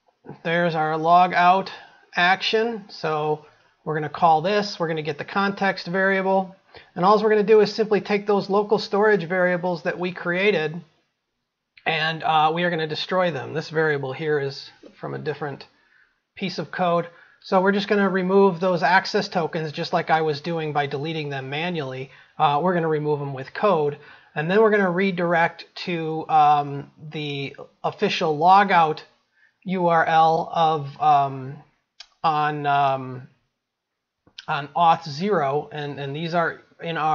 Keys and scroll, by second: 0.1 ctrl+v.